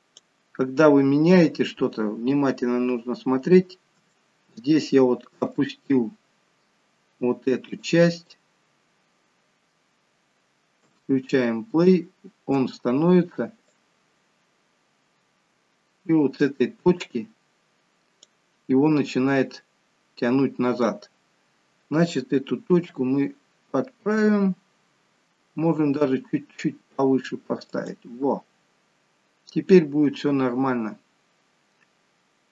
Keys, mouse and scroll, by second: 3.9-4.6 scroll down 10, 14.1 click, 18.8-19.2 scroll up 2, 19.2-19.8 scroll down 2, 19.8-22.1 scroll down 2.